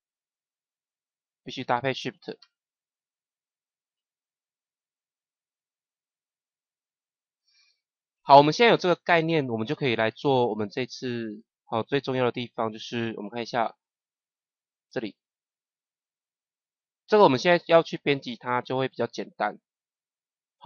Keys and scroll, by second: 3.9 KP_0.